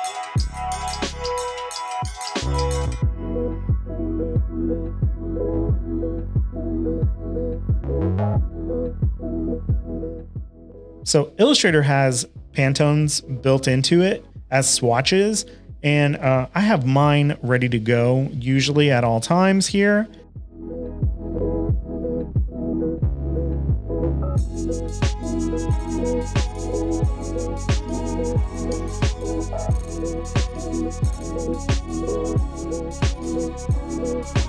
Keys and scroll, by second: 0.0-0.5 typing, 0.4 shift+super+a, 3.5-6.7 typing, 10.1-10.7 typing, 14.2 space, 14.7 space, 14.8 space, 20.5 m, 20.8 shift+super+a, 21.4 super+d, 21.4 super+d, 21.5 super+d, 21.7 shift+super+a, 21.7-27.2 typing, 28.4 v, 30.7 shift+super+a, 30.8 v, 32.3 v, 32.4 v, 33.4 v.